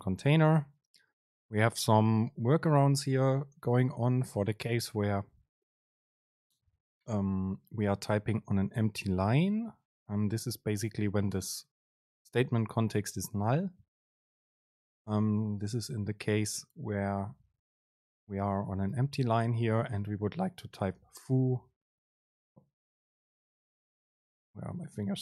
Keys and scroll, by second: 16.9 Up, 18.2 Return, 18.5 Up, 19.0 Return, 24.2 BackSpace.